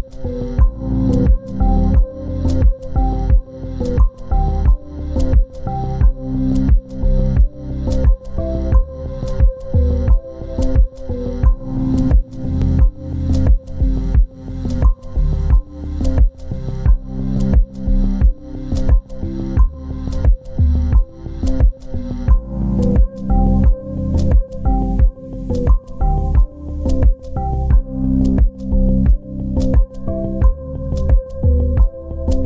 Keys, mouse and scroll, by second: 0.6 ctrl+click, 2.4 ctrl+space, 2.8 ctrl+click, 4.1 shift+click, 5.3 c, 6.0 double click, 6.7 shift+click, 8.0 t, 8.9 double click, 12.8 shift+click, 15.0 t, 16.2 double click, 19.8-20.2 scroll up 1, 22.3-22.8 scroll down 1, 31.4 double click.